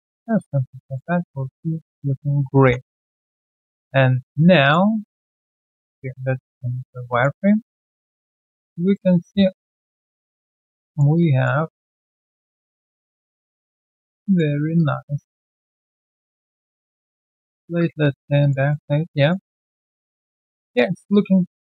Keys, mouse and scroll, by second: 0.2 alt+right click, 0.4 alt+click, 0.8 alt+middle click, 1.2 alt+right click, 1.9-2.5 scroll down 1, 3.2 3, 3.3 alt+click, 3.9 alt+right click, 4.9 alt+middle click, 5.2 alt+scroll down 1, 6.9 alt+scroll down 1, 7.0 alt+middle click, 7.4 alt+right click, 7.6 alt+click, 8.0 alt+middle click, 8.3 alt+click, 10.1 double click, 10.5 alt+click, 10.8 alt+middle click, 11.1 alt+click, 11.6 alt+middle click, 11.9 alt+click, 12.7 alt+middle click, 13.8 alt+click, 14.2 alt+middle click, 14.5 alt+right click, 14.7 alt+click, 15.0 alt+middle click, 15.4 alt+click, 17.1 alt+middle click, 17.4 alt+scroll down 1, 17.8 alt+click, 18.0 alt+middle click, 18.4 alt+click, 18.7 alt+middle click, 18.8 alt+scroll down 1, 19.2 alt+click, 19.5 alt+middle click, 19.7-20.3 alt+scroll down 1, 20.4 alt+right click, 20.6 alt+click, 20.9 alt+right click, 21.1 alt+click.